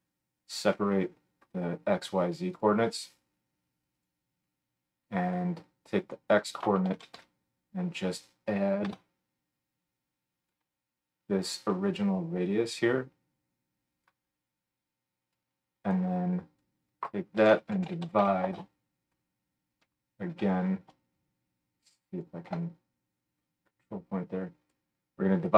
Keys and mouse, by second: 5.3-10.5 drag, 7.1 d, 12.1-19.8 drag, 20.8 shift+middle click, 21.5-25.5 shift+drag, 23.2-25.5 middle drag, 23.2-25.5 right drag.